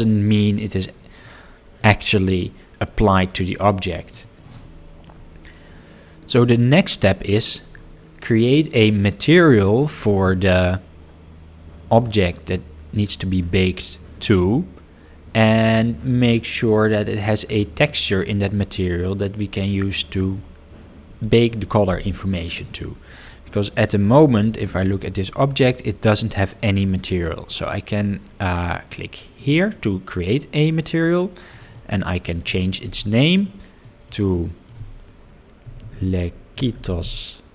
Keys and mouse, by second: 4.1 click, 8.4-10.1 middle drag, 29.4-30.5 drag, 31.5 click, 32.4-37.5 drag.